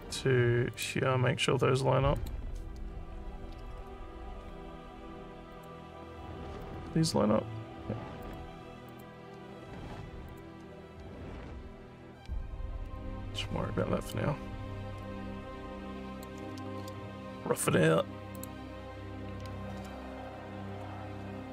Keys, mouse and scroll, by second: 0.0 click, 0.7 click, 2.2 click, 5.5 click, 6.6 click, 8.2 click, 8.9 click, 10.2 click, 14.1-16.2 alt+drag, 18.3 click, 20.3 scroll up 1.